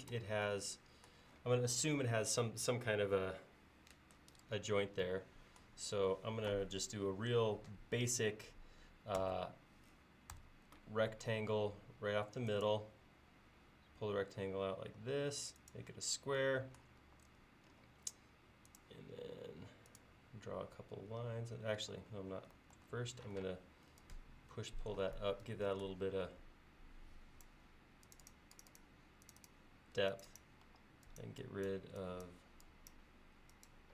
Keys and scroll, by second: 9.3 r, 17.1 l, 21.8 e, 22.8 super+z, 23.4 p, 30.7 e.